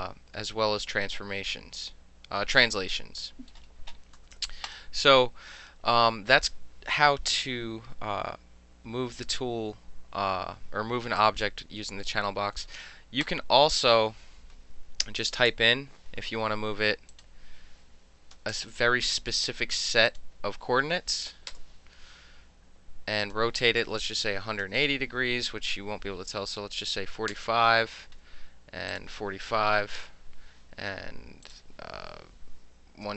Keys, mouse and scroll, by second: 3.5-4.2 middle drag, 4.6 click, 11.1 drag, 11.9 click, 13.2 click, 15.0 KP_2, 15.2 KP_0, 15.4 KP_Enter, 17.1 click, 18.3 KP_6, 18.5 Return, 20.0 click, 21.3 KP_5, 21.5 KP_Enter, 23.2 click, 24.3 KP_1, 24.4 KP_8, 24.6 KP_0, 27.0 KP_4, 27.0 KP_5, 27.3 KP_Enter, 28.9 click, 29.7 KP_5, 29.8 KP_6, 29.9 KP_Enter, 31.4 click, 33.0 KP_2.